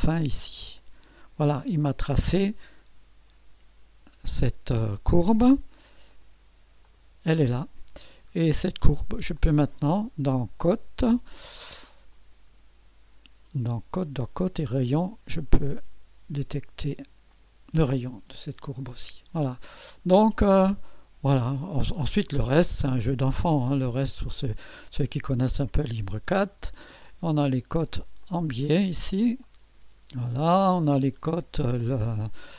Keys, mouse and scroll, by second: 0.6 click, 1.7-2.1 scroll up 1, 6.1 click, 6.8 click, 7.9 scroll down 1, 9.4 click, 14.8 click, 16.3 click, 17.3 click, 20.4 click, 20.9 click, 21.6 scroll down 1, 22.4 scroll up 1, 23.2 scroll up 2, 23.6 middle click, 24.5-25.3 scroll up 3, 25.5 middle click, 26.9 click, 28.2 click, 29.4 click, 30.2 click, 30.7-32.1 scroll down 8.